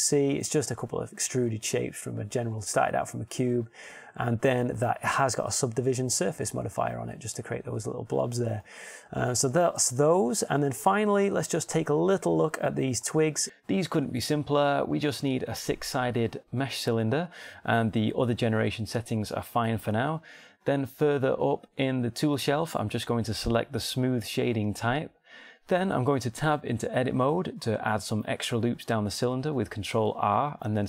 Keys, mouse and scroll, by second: 0.6 Tab, 9.2 Tab, 15.1 shift+a, 19.3-19.8 scroll down 1, 19.8-20.8 scroll up 1, 22.3-22.8 scroll down 1, 25.1 middle click, 27.6 Tab, 29.2 ctrl+r.